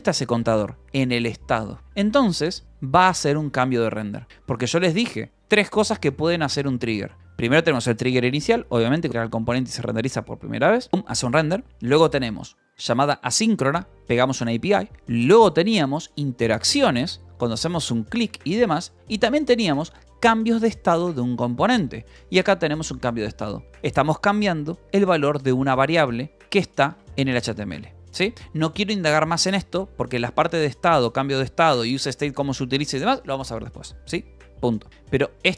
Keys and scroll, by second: 0.0-1.6 typing, 1.8 Escape, 2.7-3.6 typing, 4.3 Escape, 23.2 Escape, 23.7 shift+v, 24.3 e, 25.0 Escape, 26.3 j, 26.9 j, 27.4 k, 28.0 Escape, 28.3 k, 29.5 k, 29.8 j, 30.4 Escape.